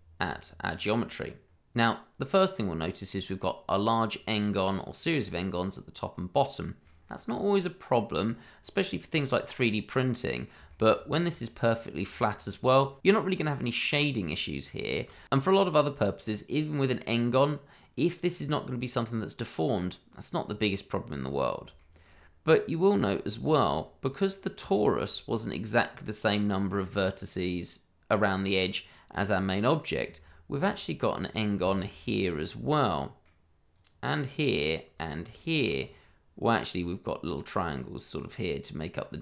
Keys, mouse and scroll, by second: 1.3 scroll up 1, 2.3 middle click, 4.1 scroll down 1, 5.2 middle click, 6.9-9.1 scroll up 1, 9.6 middle click, 11.1 scroll up 1, 11.4 middle click, 13.8 scroll down 1, 14.6 shift+middle click, 14.7 shift+middle click, 16.3 middle click, 19.5-20.1 scroll down 1, 20.1-20.8 scroll up 1, 21.7 shift+middle click, 22.1 scroll up 1, 22.4 middle click, 23.7 scroll up 1, 24.1 middle click, 24.7 shift+middle click, 24.8 middle click, 25.4 scroll up 1, 28.7 click, 29.9-30.2 scroll up 1, 30.2 Tab, 31.2 click, 31.6 shift+middle click, 31.7 middle click, 31.9-32.2 scroll up 2, 32.2 middle click, 33.7 click, 35.3 shift+middle click, 35.4 middle click, 35.5 shift+middle click, 35.7 scroll up 1, 36.7 click, 37.6 middle click.